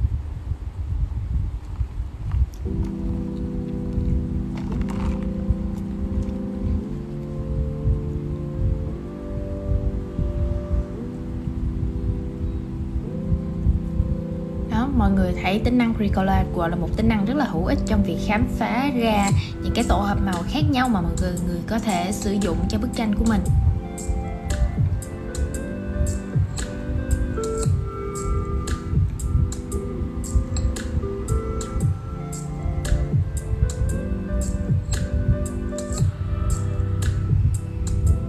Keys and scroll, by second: 26.0 super+z, 28.8 super+z.